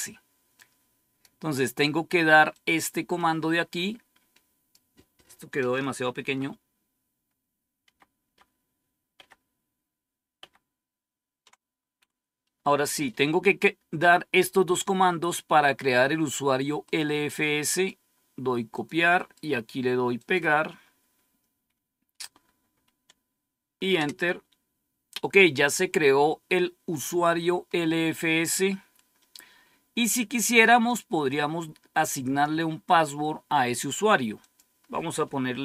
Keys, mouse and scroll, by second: 0.4 click, 2.4-5.3 drag, 6.1 ctrl+-, 7.8 ctrl++, 8.1 ctrl++, 9.1 ctrl++, 10.4 ctrl++, 16.8 right click, 17.6 click, 18.7 click, 19.1 right click, 20.1 click, 23.9 Return, 27.6-28.4 scroll down 1, 28.8-29.4 scroll down 1, 30.8-32.4 drag, 34.3 click.